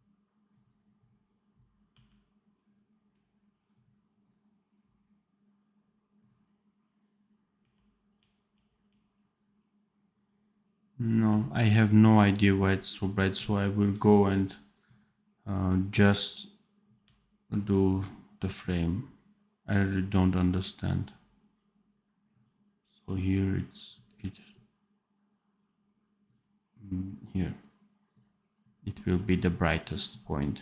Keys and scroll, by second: 1.8 r, 7.5 r, 11.0 r, 16.9 r.